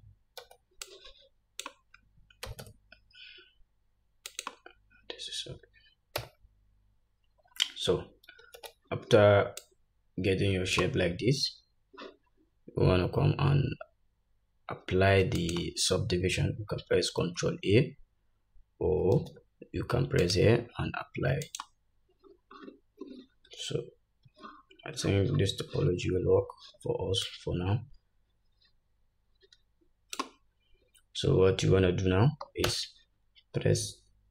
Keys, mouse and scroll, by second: 0.5 alt+z, 2.5 g, 6.2 Tab, 8.5 alt+z, 9.7-15.6 drag, 17.4 ctrl+a, 19.2 ctrl+z, 20.2-34.3 drag, 23.5 Tab, 24.3 Tab, 26.1-26.6 scroll up 1, 26.6-27.3 scroll down 1, 32.7 Tab.